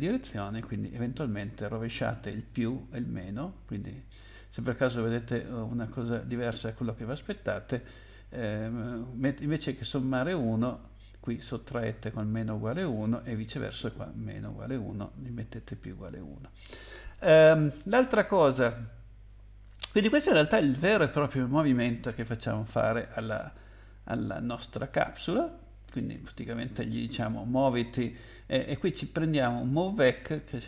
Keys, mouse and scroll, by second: 22.3 click, 24.1 click, 29.4 click, 29.6 click.